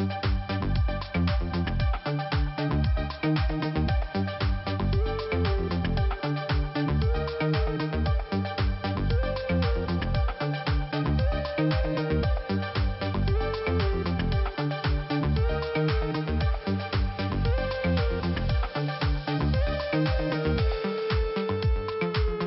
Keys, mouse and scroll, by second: 0.4 click, 1.1 click, 1.2 click, 3.0 click, 6.6 click, 7.6-8.1 scroll down 2, 11.2 click, 12.3 click, 12.4 click, 12.9 click, 15.0 click, 17.0 scroll up 1, 18.0 click, 19.4 click, 22.3 click.